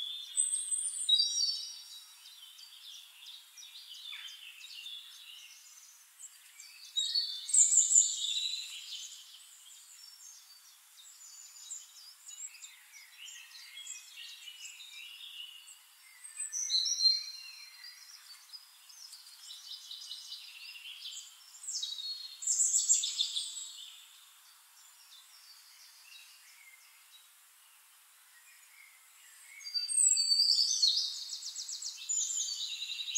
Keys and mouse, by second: 1.5 middle click, 2.1-4.5 drag, 4.8 middle click, 5.6 click, 6.2 middle click, 6.7 click, 7.2 click, 7.9-9.1 drag, 9.4 middle click, 9.9 click, 10.8 click, 11.0 click, 11.6 click, 12.4 Delete, 13.2 shift+-, 14.1 click, 14.7 middle click, 14.8 middle click, 15.5 click, 16.7 click, 17.3 click, 18.1 Delete, 19.2-20.3 drag, 20.7 shift+-, 21.9 click, 22.1 middle click, 22.7 click, 23.0 middle click, 24.4 Delete, 25.6 click, 26.7 click, 28.2 click, 28.8 click, 29.7 middle click, 30.6 middle click, 32.6 click, 33.0 middle click.